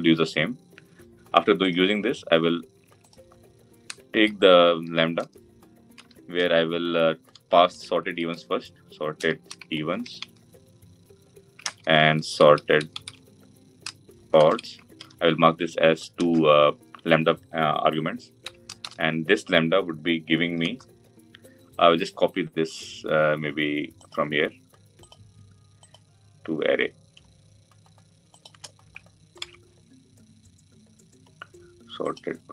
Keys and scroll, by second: 29.2 ctrl+c.